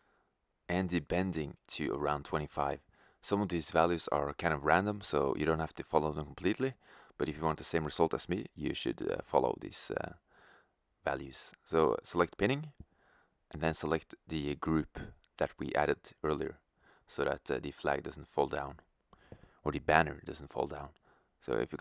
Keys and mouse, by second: 1.7-3.6 drag, 11.3-15.0 drag, 19.7-20.9 drag, 20.9-21.8 middle drag.